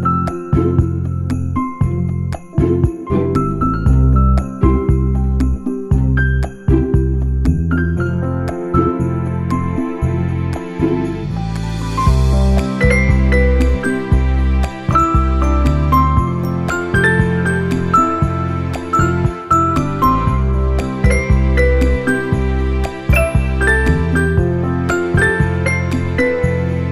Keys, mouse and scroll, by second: 0.2 scroll down 2, 0.4 shift+middle click, 1.4 shift+middle click, 1.7 middle click, 2.5 click, 2.7 middle click, 4.3 middle click, 5.1 click, 5.4 Tab, 5.9 shift+middle click, 6.1 middle click, 7.3 ctrl+l, 8.7 u, 10.8 Tab, 11.2 middle click, 13.0 Tab, 14.7 click, 15.7 s, 17.4 Tab, 17.8 middle click, 18.3 shift+middle click, 18.7 middle click, 19.9 middle click, 20.8 shift+middle click, 20.9 shift+middle click, 21.4 click, 21.6 scroll up 1, 22.1 click, 22.1 scroll up 2, 22.6 middle click, 22.9 Tab, 24.1 u, 26.1 click, 26.7 r.